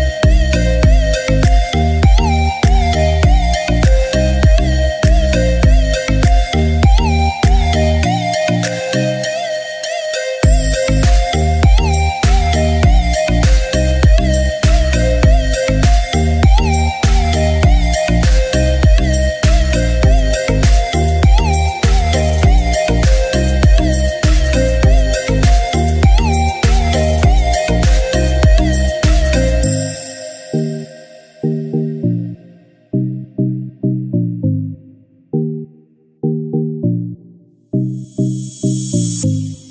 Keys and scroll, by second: 7.5 ctrl+shift+a, 18.6 g, 22.7 typing, 33.9-34.9 typing, 36.6 typing, 38.4 ctrl+shift+a.